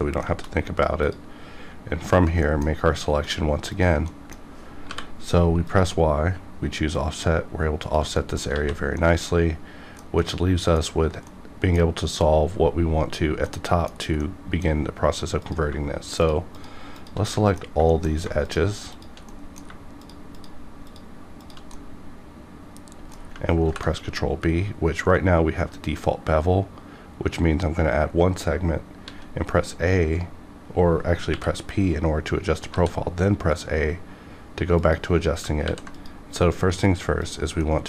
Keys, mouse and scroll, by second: 0.3 shift+middle click, 1.0 click, 2.0 ctrl+click, 2.4 middle click, 3.2 ctrl+click, 4.1 middle click, 4.8 y, 5.6 click, 7.8 click, 7.8 click, 8.2 middle click, 8.5 alt+a, 8.8 alt+scroll down 1, 9.0 middle click, 10.4-13.5 middle drag, 13.5 middle click, 13.9 scroll down 1, 14.2 middle click, 14.7 scroll up 1, 14.8-15.4 scroll down 1, 15.4 click, 16.2 shift+click, 17.3 middle click, 17.9 shift+middle click, 18.4 shift+click, 19.3 middle click, 20.0 shift+click, 21.7-23.6 middle drag, 23.6 ctrl+b, 24.5-26.2 scroll up 1, 26.2-27.4 scroll down 1, 27.4-29.1 scroll up 1, 29.1 a, 31.3 p, 32.6 a, 34.8 click, 35.6 ctrl+r, 35.9 ctrl+click, 35.9 ctrl+click, 37.6 middle click.